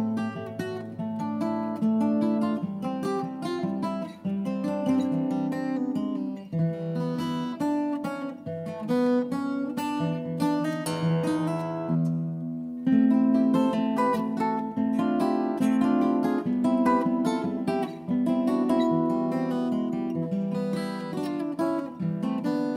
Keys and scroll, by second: 3.6-4.6 typing, 15.3 ctrl+v, 15.5 Return, 17.5 Return, 17.9 Delete, 18.6 Return, 18.9 ctrl+a, 21.0 Left, 21.0 Left, 22.5 shift+Left, 22.7 shift+Left.